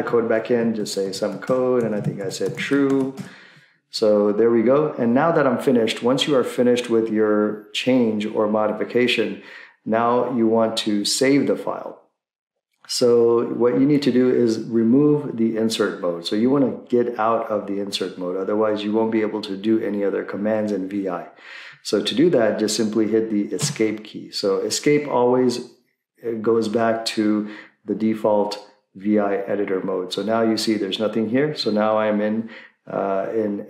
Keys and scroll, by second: 0.8-3.6 typing, 23.6 Escape.